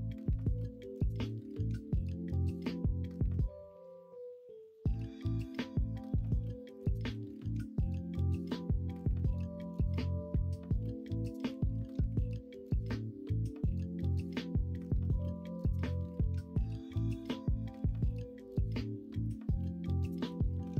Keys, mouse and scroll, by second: 1.9 click, 2.2 scroll up 1, 2.4 middle click, 2.9 scroll down 1, 3.5-3.8 scroll up 1, 3.8-4.4 scroll down 1, 4.4 middle click, 4.6 scroll down 1, 4.8 scroll up 1, 5.0 scroll down 1, 5.4 middle click, 6.0 scroll up 1, 7.2 middle click, 7.8 scroll up 1, 8.1-8.5 scroll down 1, 8.5-9.0 scroll up 1, 9.0 middle click, 12.3 shift+s, 14.6 shift+a, 18.1 middle click, 19.2 middle click, 20.0 click.